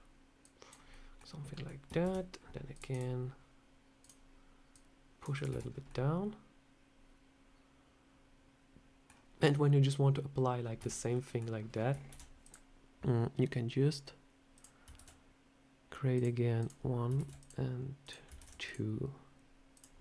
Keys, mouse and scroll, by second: 0.3 click, 0.8 middle click, 1.4 middle click, 1.9 ctrl+r, 3.8 click, 4.6 click, 5.2 click, 5.3 Tab, 5.5 scroll down 2, 5.7 middle click, 10.5 scroll up 2, 10.6 Tab, 11.0 middle click, 11.9 ctrl+r, 14.8 ctrl+r, 17.0 ctrl+r, 18.2 ctrl+r, 19.9 middle click.